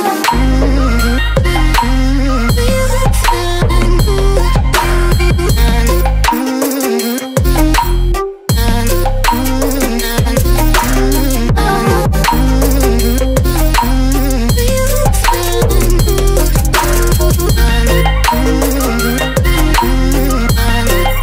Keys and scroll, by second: 8.1 Return, 9.5 ctrl+j, 10.0 ctrl+t, 11.8 ctrl+z, 14.4 ctrl+z.